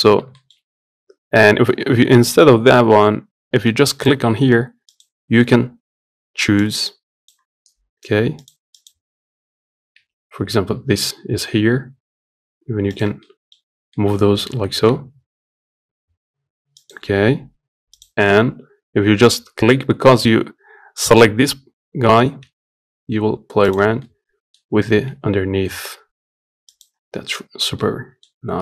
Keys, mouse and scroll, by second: 4.7 click, 8.6 click, 13.0 middle click, 13.3-13.6 scroll up 1, 13.6-14.7 middle drag, 14.7 g, 23.8-24.8 middle drag, 24.8 g, 27.5 middle click, 28.0 scroll up 3, 28.4-28.6 middle drag.